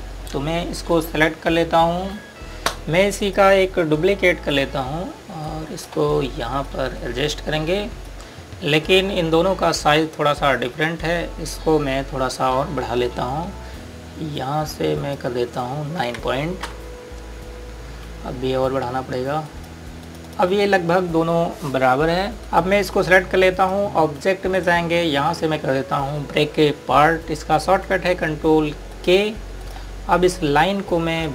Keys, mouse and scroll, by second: 1.8 click, 2.5 right click, 3.0 z, 3.3 click, 6.4 right click, 7.6 click, 19.1 KP_Enter, 20.3 click, 29.8 click.